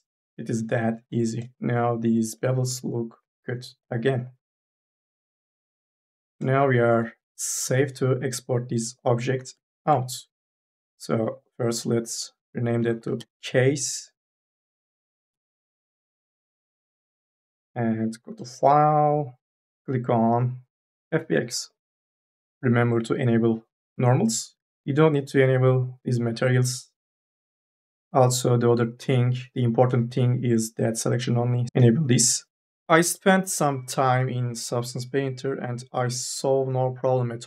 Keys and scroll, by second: 9.2 4, 9.4 e, 12.6 c, 12.9 s, 13.3 e, 14.7 KP_3, 15.5 ctrl+a, 15.8 4.